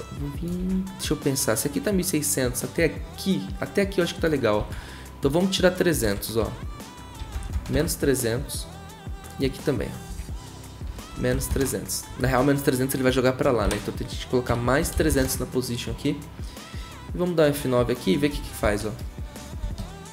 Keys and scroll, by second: 0.6 ctrl+z, 4.6 ctrl+z, 6.0 Right, 6.4-8.1 typing, 10.1 Right, 10.6-12.9 typing, 13.6 Right, 14.2-15.6 typing, 18.3 F9, 18.6 0.